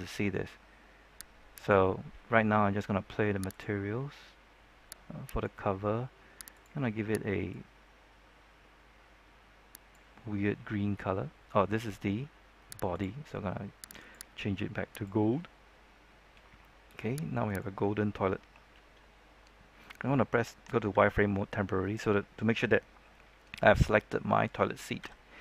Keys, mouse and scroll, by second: 1.5 right click, 3.5 click, 5.3 click, 5.4 right click, 6.5-10.5 drag, 17.4 right click, 20.9 z, 22.9 scroll down 1, 23.1 middle click, 23.5-23.8 scroll up 1, 23.8 middle click, 24.9 z.